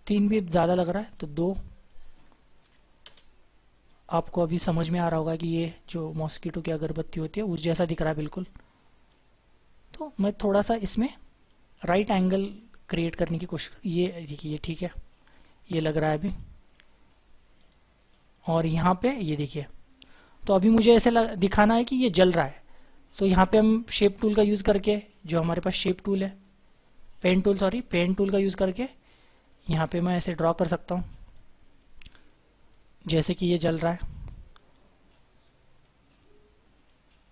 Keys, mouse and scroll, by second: 2.6 typing, 3.0 Return, 4.4 scroll down 1, 5.0-9.9 scroll up 1, 14.3 double click, 14.8 scroll down 1, 15.3 scroll up 1, 17.6 right click, 19.0-19.5 scroll down 1, 19.6-20.6 scroll up 1, 21.1-21.8 scroll down 1, 21.8-24.8 scroll up 1, 27.9-29.8 scroll up 1, 29.8 double click, 34.5-36.6 scroll up 1.